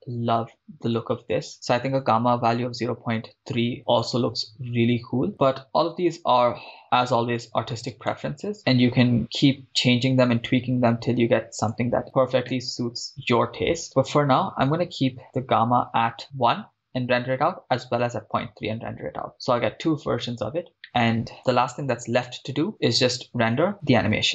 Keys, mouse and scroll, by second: 1.3-3.2 drag, 4.7-5.3 scroll up 5, 5.3 shift+middle click, 5.3 scroll down 2, 8.1 click, 8.1 right click, 11.7-12.0 drag, 12.0 scroll down 2, 12.5-13.4 shift+middle drag, 15.3-16.6 drag, 20.8 shift+middle click, 22.9-24.3 drag.